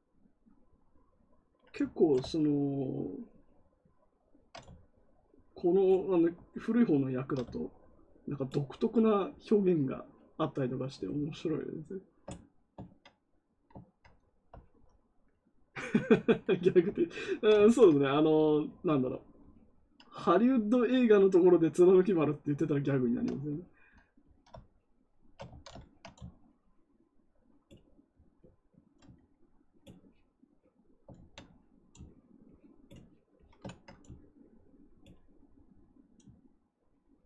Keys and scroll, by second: 17.6 ctrl+z, 25.4 ctrl+z, 31.1 ctrl+z.